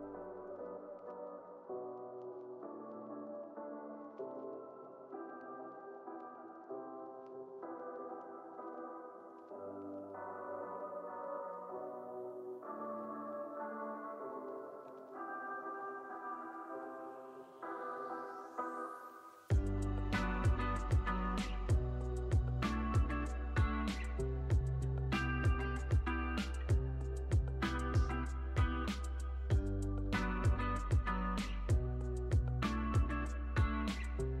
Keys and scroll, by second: 8.7 space, 11.9 super+s, 14.4 u, 31.3 u.